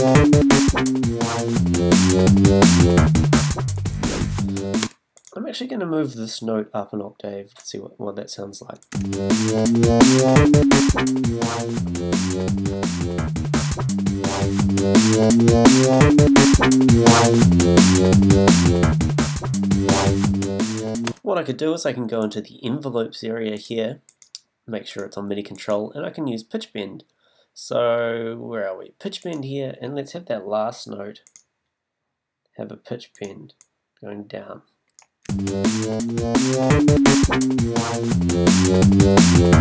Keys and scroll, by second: 4.8 space, 8.9 space, 21.1 space, 36.3 space.